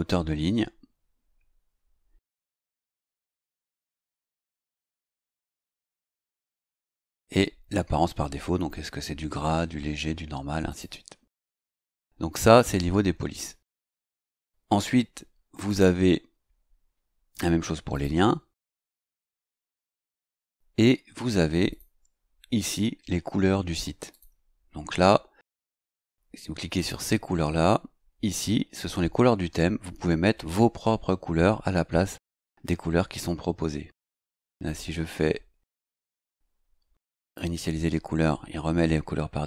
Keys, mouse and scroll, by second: 3.2 click, 4.3 scroll down 1, 5.1 scroll down 1, 6.2-6.9 scroll up 3, 10.7 click, 15.7 click, 17.9 click, 20.3 click, 21.7 click, 24.1 click, 26.8 click, 34.6 click, 37.2 click.